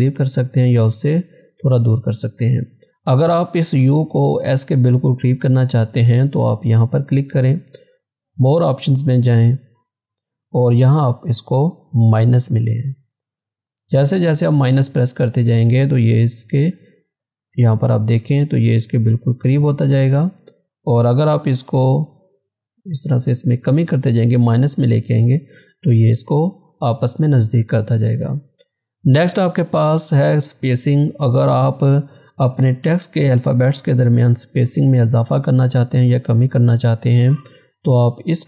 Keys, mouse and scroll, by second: 1.5 click, 5.3 click, 8.0 click, 12.7 click, 37.8 click.